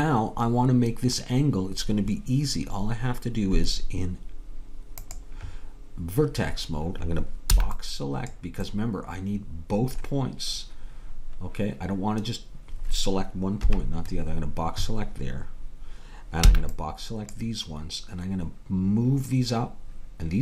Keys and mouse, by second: 6.2-7.6 drag, 7.6 b, 8.7-11.1 middle drag, 13.7 KP_3, 16.6 b.